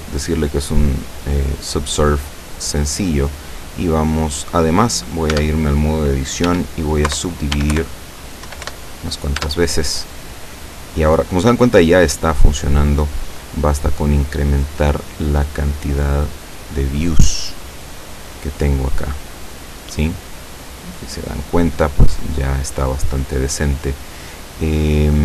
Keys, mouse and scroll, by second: 0.1 click, 1.1 scroll up 1, 1.2 scroll down 2, 1.8 scroll down 2, 2.4-3.7 middle drag, 5.4 Tab, 6.5 w, 7.3 Return, 7.6 w, 7.8 Return, 8.5 w, 8.7 Return, 9.4 Tab, 11.5-13.7 middle drag, 14.2 click, 14.7 click, 15.2 click, 15.6 click, 16.4 click, 17.4-20.7 middle drag, 20.7-21.2 scroll up 1, 21.2-21.8 scroll down 1, 21.9-23.2 middle drag, 23.2 scroll up 2, 23.4 scroll down 2, 23.6 scroll up 2, 24.6 scroll down 2.